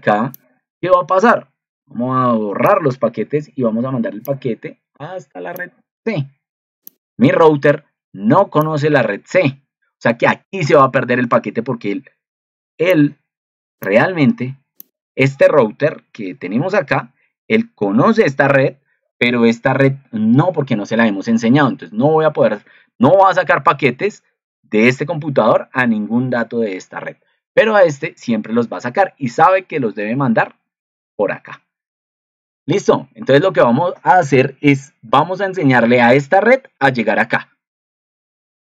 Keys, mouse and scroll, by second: 16.1 ctrl+2.